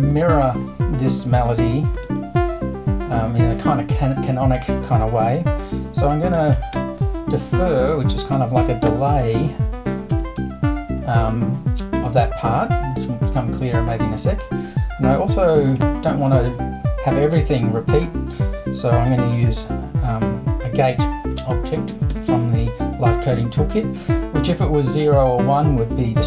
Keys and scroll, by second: 2.0 super+i, 5.3-7.2 typing, 8.3-10.4 typing, 15.8 super+i, 18.8-20.0 typing, 22.1 space.